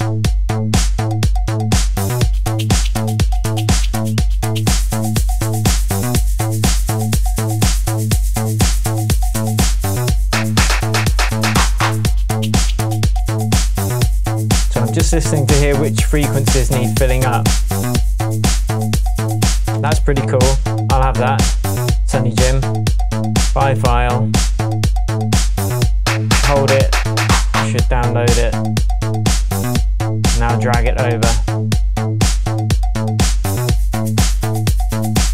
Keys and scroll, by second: 19.8 space.